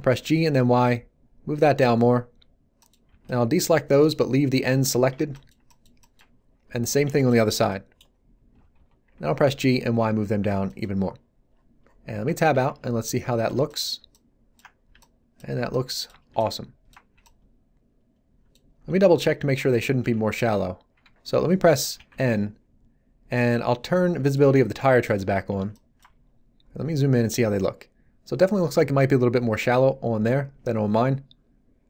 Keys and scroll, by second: 0.1 y, 3.0 b, 7.4 b, 8.5 g, 8.7 y, 12.1 Tab, 20.0 1, 21.9 n.